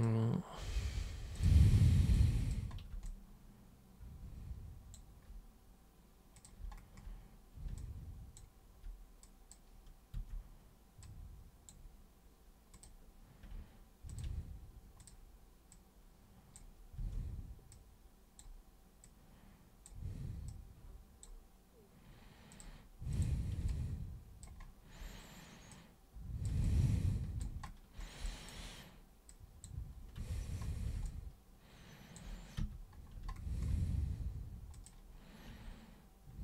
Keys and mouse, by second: 1.4 super+click, 2.1 super+click, 3.1-4.9 alt+super+drag, 6.4 super+click, 7.8 alt+super+click, 9.2 super+click, 10.2 super+w, 11.0 super+click, 12.7 super+click, 14.1 ctrl+super+click, 15.0 super+click, 15.7 super+click, 17.0 super+w, 17.7 super+click, 19.0 super+click, 20.5 super+click, 22.5 super+click, 23.1 super+click, 23.7-24.4 alt+super+drag, 25.7 super+click, 26.6 alt+super+click, 28.3 alt+super+click, 29.3 super+click, 30.2 super+3, 31.1-32.2 alt+super+drag, 32.6 super+1, 34.8 click.